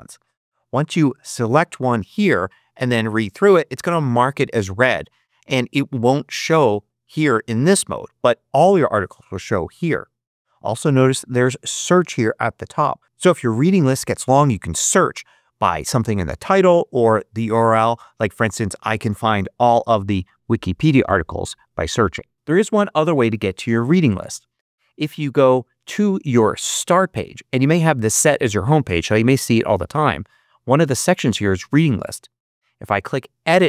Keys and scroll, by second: 19.3-20.5 typing.